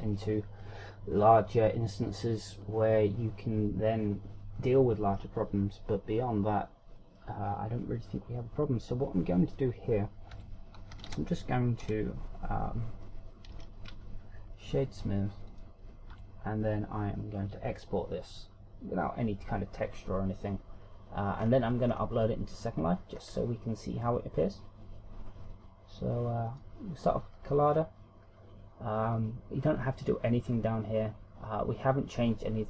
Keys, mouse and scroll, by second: 11.3 Tab, 11.9 a, 12.1 a, 12.8 w, 14.5 w, 17.1 Tab, 21.8-22.4 scroll down 2, 22.4 scroll up 2, 22.9 scroll up 2, 24.1 scroll up 1, 25.1 scroll up 1, 27.4 click.